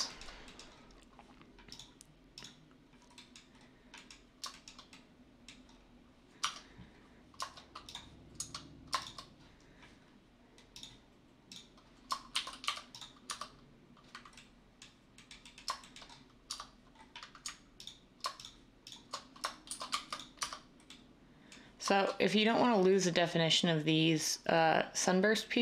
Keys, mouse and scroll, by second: 6.4 Tab, 12.3-13.3 typing, 16.5 Tab, 19.4-20.4 typing.